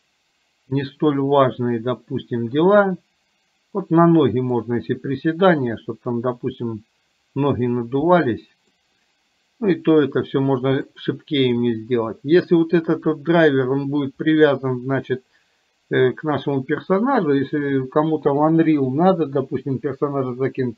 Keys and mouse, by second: 8.9-11.0 middle drag.